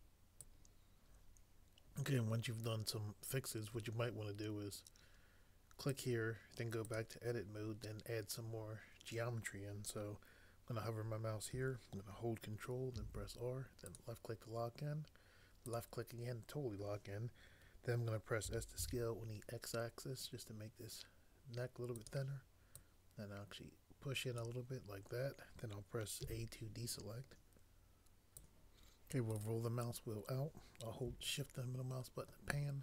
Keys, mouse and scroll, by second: 13.0 ctrl+r, 18.2-19.2 typing, 26.2 a.